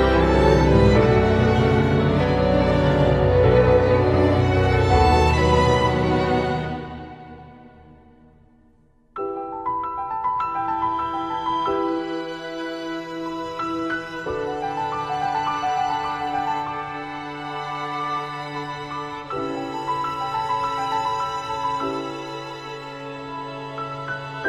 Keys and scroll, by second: 2.5 ctrl+z, 4.8 ctrl+e, 5.0 ctrl+t, 5.6 ctrl+z, 6.2 ctrl+z, 7.1 ctrl+z, 7.7 ctrl+z, 7.9 ctrl+s, 8.9 ctrl+z, 15.2 ctrl+z, 15.6 ctrl+z, 17.2 ctrl+z, 17.7 ctrl+z, 19.6 ctrl+z, 20.4 ctrl+z, 20.9 ctrl+z, 21.2 ctrl+z, 24.3 ctrl+z.